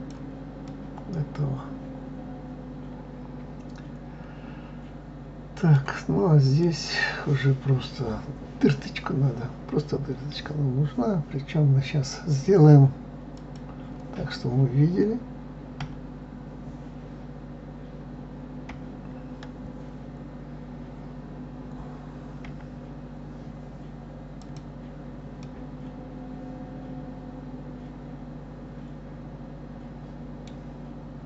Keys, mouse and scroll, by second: 0.6 scroll up 1, 0.7-3.7 middle drag, 6.5 click, 13.4 click, 15.8 KP_7, 18.7 KP_9, 22.5 KP_9, 24.4 click, 25.4-28.5 middle drag.